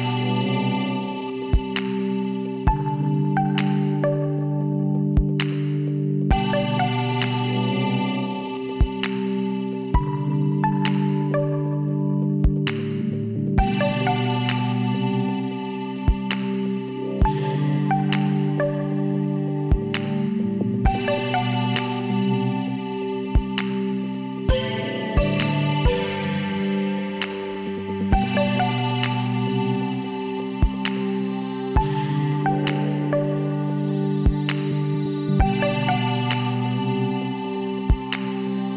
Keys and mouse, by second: 0.7 KP_1, 2.4 r, 4.9 s, 10.5-14.1 middle drag, 14.1 click, 14.9-16.6 drag, 18.2 e, 19.5-21.3 drag, 24.0 z, 24.6-28.1 drag, 29.1 ctrl+KP_Add, 32.1 s, 35.7-37.6 drag.